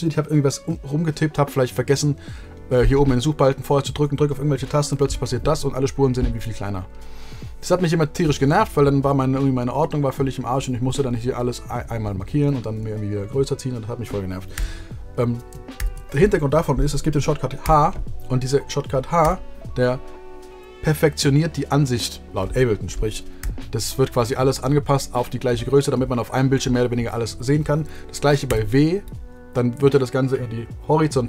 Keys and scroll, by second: 4.9 h, 14.5 super+z, 15.7 shift+super+z, 17.6 h, 28.4 w.